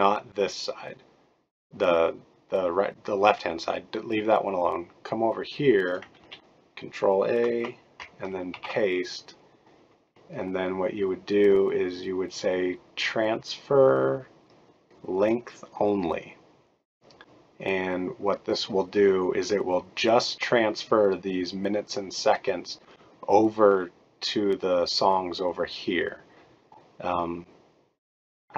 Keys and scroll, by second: 6.2 ctrl+a, 8.5 ctrl+v.